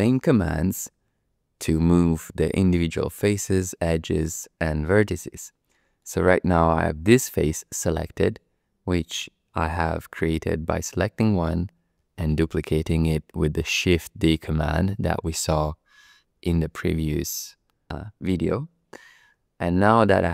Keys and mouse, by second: 1.9 click, 5.1 shift+click, 5.7 shift+click, 5.9 shift+middle click, 6.2-8.3 middle drag, 9.6 click, 12.0 shift+d, 15.2 click, 16.3 ctrl+z, 17.1 ctrl+z, 19.9 click.